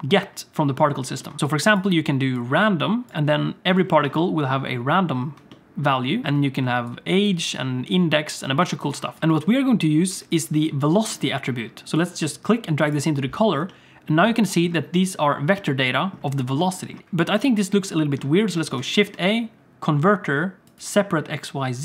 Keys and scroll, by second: 9.2 alt+a, 9.2 ctrl+s, 9.3 space, 10.3 space, 17.0 shift+a, 18.8 shift+a.